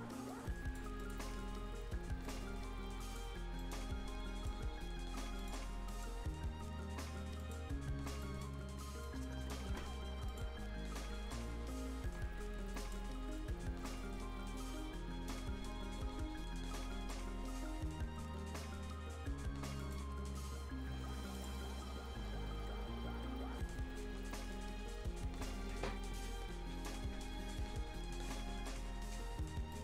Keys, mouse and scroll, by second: 0.2-3.5 drag, 3.5-5.3 right drag, 5.3 click, 5.8 right click, 7.3 click, 7.8 scroll down 1, 8.7 scroll up 1, 9.0 right click, 10.2 click, 21.4 click, 29.4 scroll down 1, 29.7-29.8 right drag.